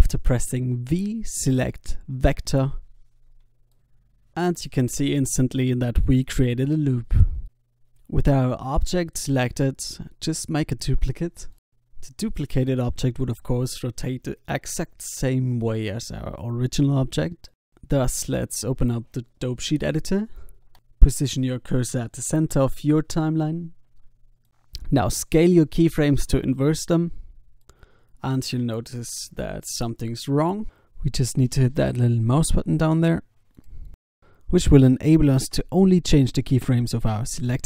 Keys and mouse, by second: 8.1 alt+a, 11.1 shift+d, 11.2 click, 11.5 s, 13.2 Tab, 15.1 alt+a, 16.6 alt+a, 17.9 click, 19.6 click, 21.6 s, 24.5-26.5 drag, 25.3 s, 28.5 alt+a, 30.7 alt+a, 34.3-35.7 drag, 34.3-35.5 right drag, 36.7 s.